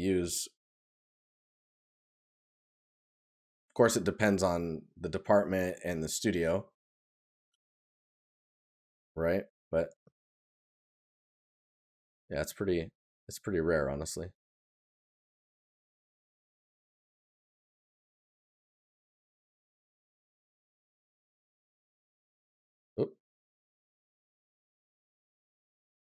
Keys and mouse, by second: 5.8 right click, 9.5 right click, 12.2 right click, 13.5 right click, 14.8 right click, 16.0 right click, 21.1 right click, 25.8 right click.